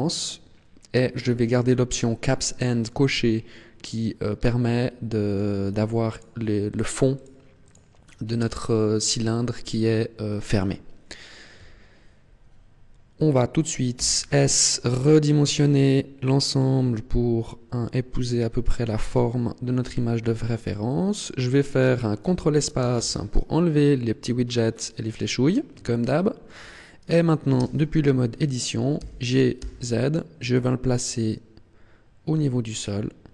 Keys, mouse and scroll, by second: 2.3 middle click, 4.5 middle click, 6.0 click, 6.6 click, 7.1 click, 7.6 click, 10.2-11.5 scroll down 1, 11.5 KP_1, 14.0 s, 19.8 click, 20.6 shift+middle click, 21.6 scroll up 2, 22.8 ctrl+space, 24.5 scroll up 2, 26.0 shift+middle click, 27.5 Tab, 28.9 g.